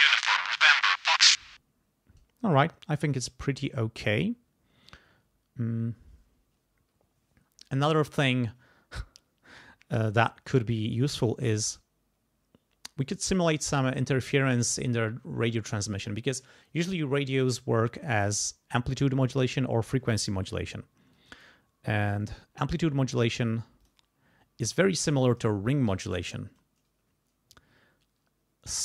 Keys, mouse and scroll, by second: 1.4 space, 3.1 click, 21.1 click, 22.2 right click, 23.8 click, 25.6-26.8 typing.